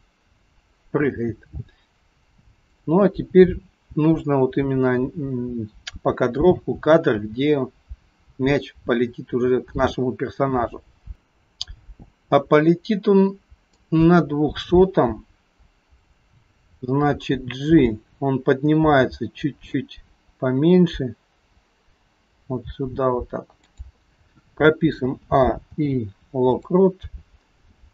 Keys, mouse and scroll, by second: 13.8 click, 16.0 click, 17.3 g, 25.0 a, 25.8 i, 27.8 scroll down 2.